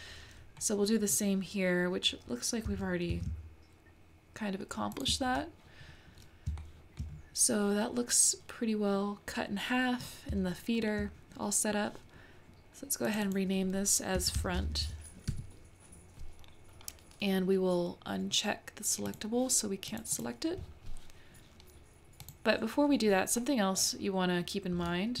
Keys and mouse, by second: 2.7 g, 6.6 shift+middle click, 10.5-10.9 shift+middle drag, 13.1 click, 13.4-16.9 drag, 19.1 click, 19.9 click, 22.2 click, 23.5-25.2 middle drag.